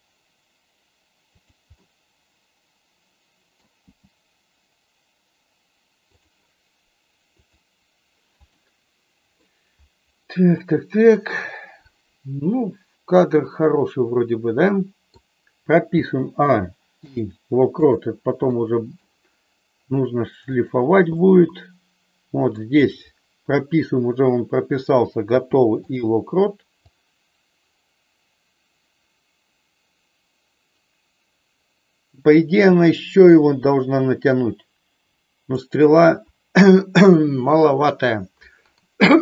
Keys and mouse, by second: 1.3 click, 1.8-3.5 middle drag, 3.9 g, 6.0 click, 8.4-9.4 middle drag, 10.5-15.2 middle drag, 16.0 a, 16.9 i, 18.4 middle click, 20.5 click, 21.0-22.5 middle drag, 25.2 i, 26.8-35.5 drag.